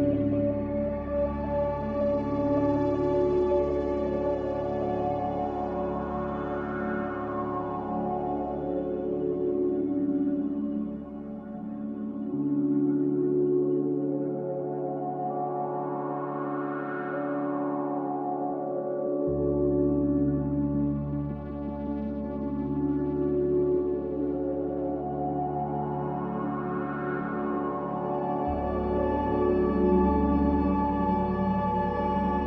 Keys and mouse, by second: 2.6-3.4 middle drag, 7.2 click, 9.1-9.5 drag, 11.2 Escape, 12.7 click, 14.5-19.5 drag, 20.8 middle click, 23.9-32.4 drag.